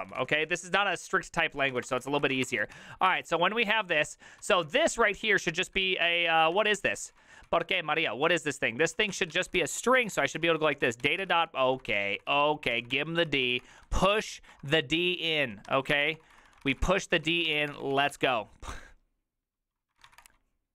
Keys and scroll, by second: 0.0-14.7 typing, 4.0 ctrl+c, 15.7 Tab, 15.8-20.6 typing.